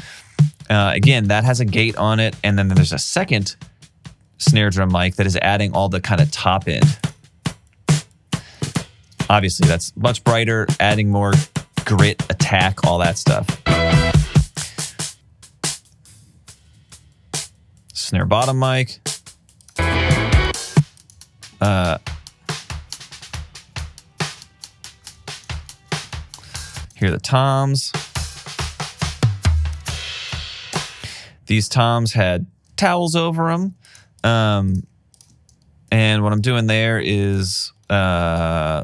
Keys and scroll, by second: 25.6-27.4 typing, 29.8-30.8 typing, 32.0 super+s, 33.8 typing, 34.9 typing, 37.5 alt+super+w.